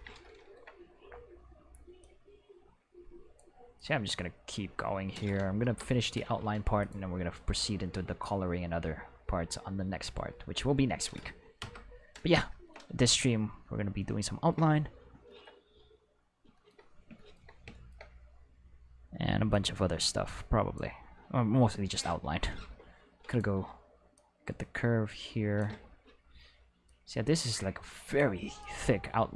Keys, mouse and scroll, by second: 2.0-3.4 drag, 3.8-5.1 drag, 5.6 Return, 6.8 click, 8.2-11.0 drag, 11.6 Return, 19.5-20.8 drag, 22.6 Escape, 23.3 click, 24.2-25.6 drag, 25.7 Escape, 26.9-28.2 drag, 28.6-29.3 drag.